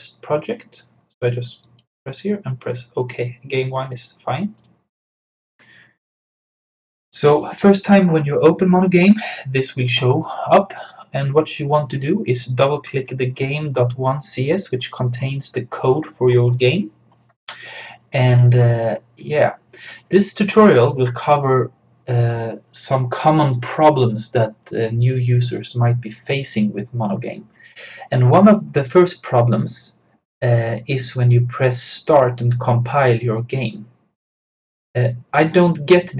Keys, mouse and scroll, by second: 1.7 click, 4.6 click, 16.4 click, 33.4 click.